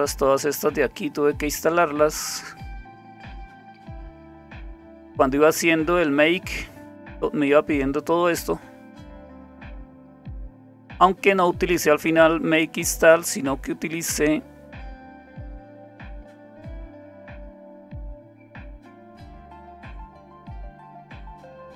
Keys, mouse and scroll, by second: 8.2-10.7 scroll down 2, 10.7-11.2 scroll down 1, 11.2-13.2 scroll up 3, 13.2-14.3 scroll down 2, 14.3-15.3 scroll down 1, 15.3-16.5 scroll down 1, 16.5-17.8 scroll down 1, 17.8-18.8 scroll down 1, 18.8-19.5 scroll down 1, 19.5-20.7 scroll down 1, 20.7-21.7 scroll down 1.